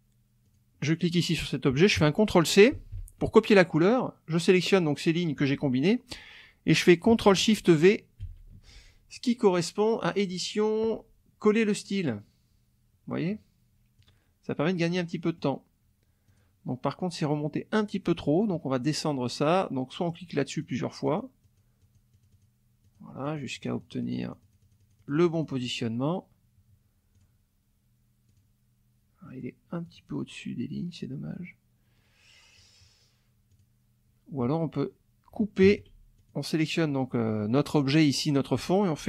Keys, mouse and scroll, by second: 0.4 click, 2.7 ctrl+c, 4.7 click, 8.2 ctrl+shift+v, 10.0 click, 14.0 click, 14.9 middle click, 15.0 click, 16.3 click, 20.1 click, 20.6 click, 21.0 click, 22.8 click, 23.3-25.8 drag, 27.1 click, 28.2 click, 29.3 middle click, 29.8 click, 32.6 click, 33.5 click, 35.6 ctrl+x, 36.2 ctrl+click.